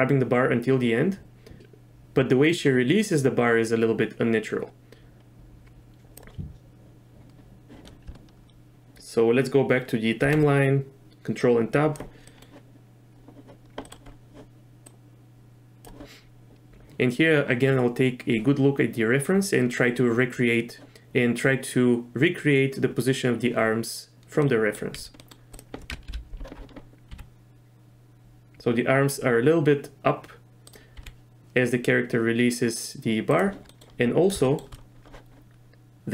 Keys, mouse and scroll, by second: 10.2 ctrl+Tab, 11.5 click, 12.3 middle click, 13.8 middle click, 14.9-15.8 drag, 24.4 middle click, 24.9 z, 25.2 middle click, 26.1 KP_3, 27.1 r, 31.0 r, 33.7 middle drag, 34.4 shift+middle drag.